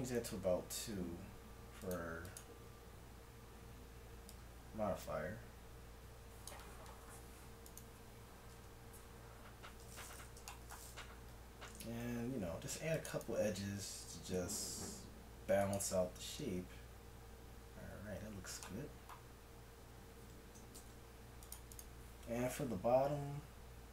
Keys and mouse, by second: 0.2-4.2 drag, 4.3-6.2 drag, 7.7 click, 8.6 right click, 8.6 KP_1, 11.0 Tab, 12.0 ctrl+r, 14.2 s, 16.2 Tab, 18.2 Tab, 20.8 ctrl+Tab, 23.2 i.